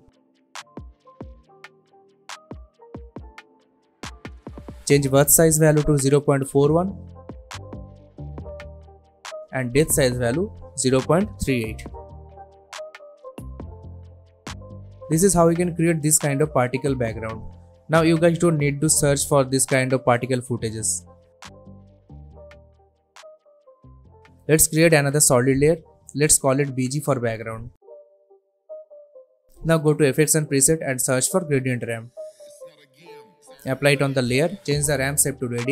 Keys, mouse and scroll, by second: 0.8 scroll down 1, 1.2-1.9 scroll up 1, 1.9-2.5 click, 2.3 space, 4.7 space, 5.1-6.2 drag, 8.7 Return, 9.9 click, 11.9 Return, 13.3-13.9 click, 13.6 space, 15.6 space, 16.3-16.8 drag, 21.2 ctrl+z, 21.4 ctrl+click, 21.9-22.9 drag, 24.3 right click, 24.8 click, 27.5-28.4 typing, 28.4 Return, 29.4 click, 31.1-32.1 typing, 33.3-35.7 drag.